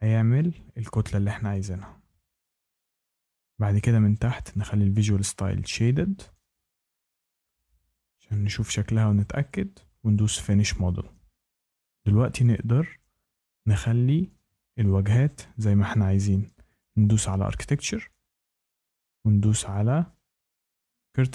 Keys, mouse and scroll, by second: 2.2 shift+right click, 4.3 click, 5.7 click, 7.5 shift+right click, 7.8 click, 9.3 shift+middle click, 10.2 click, 13.4 shift+middle click, 16.7 click, 19.4 click.